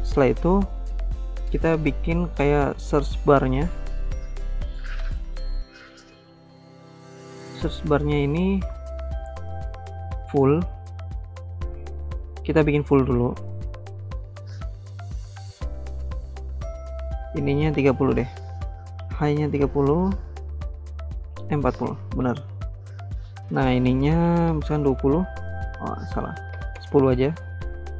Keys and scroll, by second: 18.5-19.6 typing, 21.6-22.4 typing, 22.5 Return, 24.1-24.9 typing, 26.1-27.0 typing.